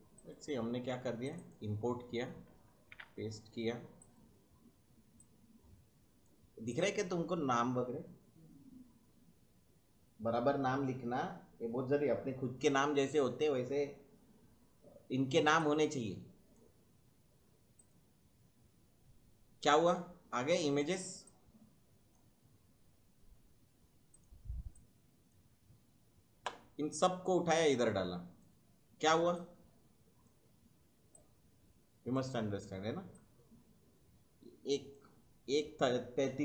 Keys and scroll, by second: 2.9 ctrl+v.